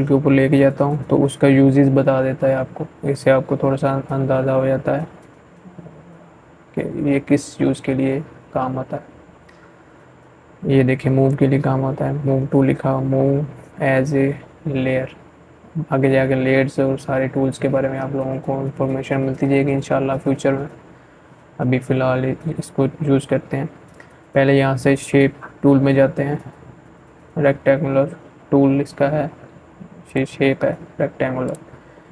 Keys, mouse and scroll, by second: 27.9-32.1 drag.